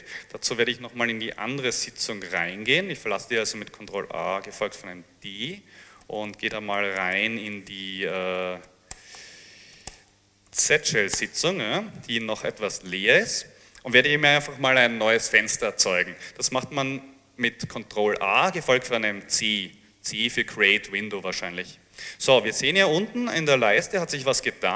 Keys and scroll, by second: 3.9 ctrl+a, 4.6 ctrl+d, 5.8-11.3 typing, 18.7 ctrl+a, 19.4 c.